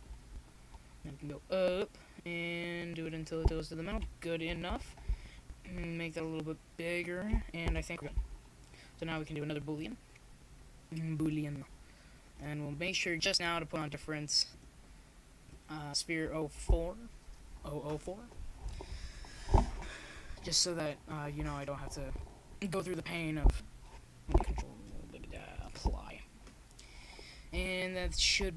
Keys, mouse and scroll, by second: 0.3 ctrl+z, 1.8 ctrl+alt+shift+x, 2.9 ctrl+alt+shift+x, 5.3 ctrl+alt+shift+c, 9.4 g, 12.9 shift+s, 16.5 s, 19.2 g, 20.9 KP_1, 22.0 z, 23.9-24.9 middle drag, 25.5 click, 27.4 KP_7, 28.3 z.